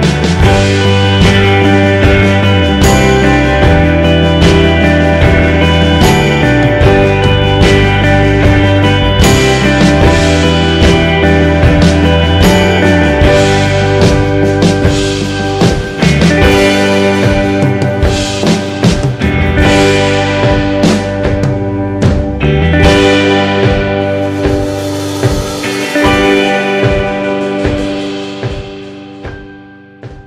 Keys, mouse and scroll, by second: 11.1-13.1 drag.